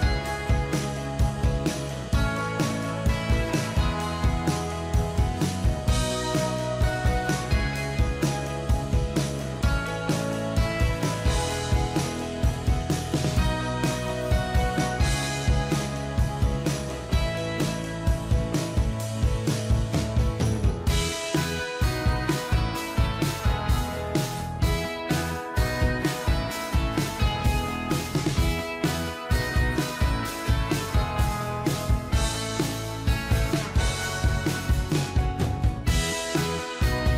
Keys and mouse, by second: 5.4 ctrl+t, 6.3 alt+click, 11.1 Right, 11.6 Right, 13.8 Right, 14.0 ctrl+click, 23.4 1, 24.5-26.3 typing, 29.3 0, 30.9 5, 31.2 BackSpace, 31.3 6, 32.7 /, 32.7 2, 32.8 0, 33.2 1, 34.2 ctrl+a.